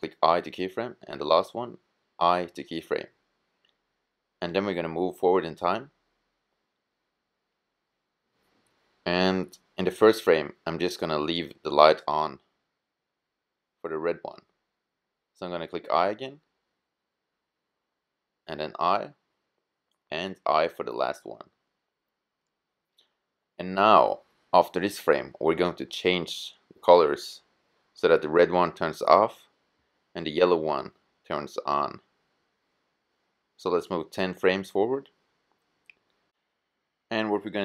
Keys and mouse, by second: 0.5-2.2 drag, 1.8 i, 5.2-6.9 drag, 15.2 i, 16.8-18.6 drag, 18.5 i, 19.6-21.4 drag, 20.9 i, 31.5-37.6 drag.